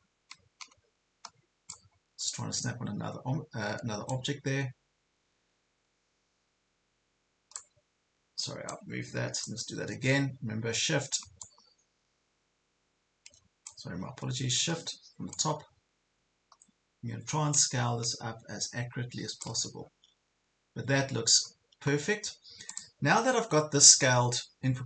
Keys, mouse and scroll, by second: 2.1 ctrl+scroll up 1, 2.9 scroll down 1, 4.1-10.3 drag, 11.4-14.3 shift+drag, 15.3-19.5 shift+drag, 19.9 ctrl+scroll up 1, 20.5 ctrl+scroll up 1, 22.7 click, 23.2 ctrl+scroll down 1, 23.9 ctrl+scroll down 1.